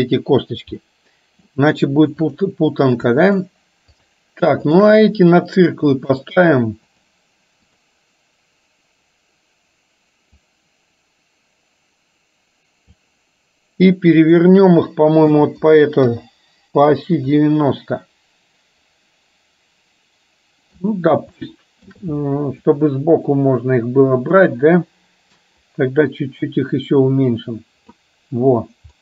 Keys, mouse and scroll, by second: 1.0-1.5 middle drag, 3.5 shift+click, 4.0-4.3 shift+drag, 4.8 shift+click, 6.2-7.2 drag, 7.7 click, 10.5-13.0 drag, 14.3-16.5 drag, 17.5-20.8 middle drag, 21.5 shift+middle click, 22.0 shift+scroll down 1, 22.7 scroll up 1, 22.8-24.5 middle drag, 25.7-28.0 drag.